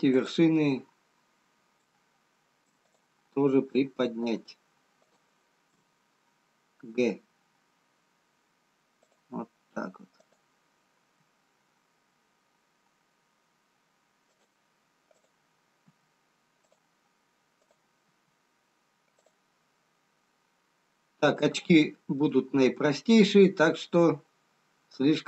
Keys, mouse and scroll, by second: 0.1 click, 3.5 click, 4.6 shift+click, 7.2 shift+click, 7.2 g, 10.6 click, 11.8 g, 15.7 click, 15.7 g, 20.4-22.1 scroll down 2, 22.1 middle click, 23.5-24.8 scroll down 1, 24.8 middle click.